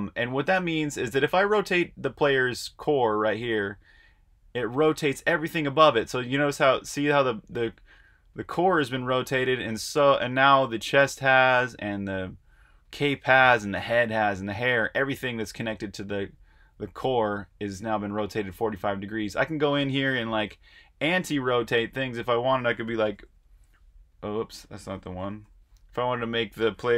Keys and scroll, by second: 22.8-23.6 typing, 24.9-25.7 typing.